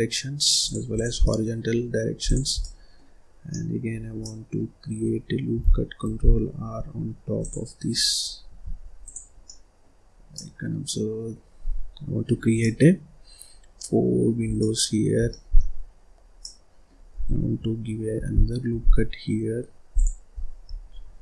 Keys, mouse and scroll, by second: 0.8 click, 1.1 scroll down 1, 1.1 middle click, 2.1 click, 2.5 middle click, 3.3 scroll down 1, 3.4 middle click, 3.8 scroll up 1, 4.1-5.9 middle drag, 5.9 ctrl+r, 8.9 click, 9.2 scroll down 1, 9.3 middle click, 10.0 scroll up 1, 10.2-14.4 middle drag, 14.4 scroll down 1, 14.5 middle click, 15.1 scroll down 2, 15.2 middle click, 15.6-16.3 scroll up 5, 16.3-18.0 middle drag, 18.0 ctrl+r.